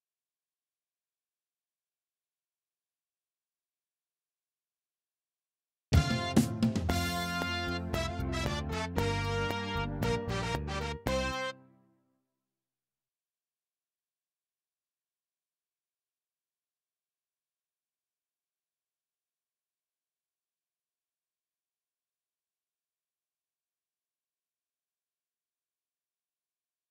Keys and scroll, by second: 5.8 space, 11.5 space.